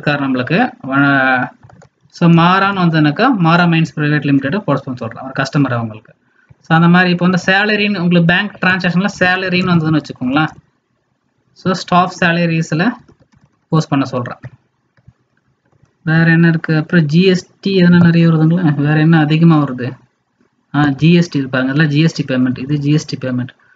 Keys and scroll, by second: 15.6 alt+Tab.